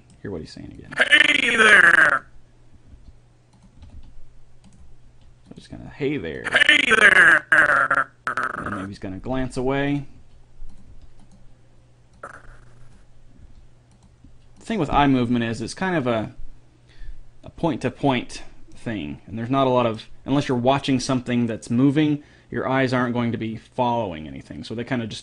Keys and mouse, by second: 1.0-2.6 drag, 3.2 g, 4.0 r, 5.2 r, 6.6 click, 9.5 g, 10.4 r, 11.1 g, 12.4-14.0 drag, 13.7 g, 14.5 r.